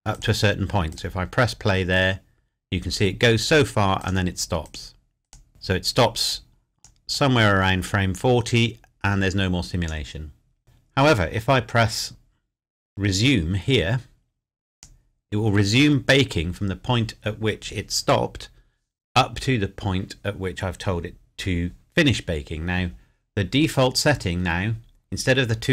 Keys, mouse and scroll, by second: 0.2 click, 4.0 click, 5.0 click, 5.6 click, 12.2 scroll up 1, 14.8 click, 23.4-25.1 scroll down 1.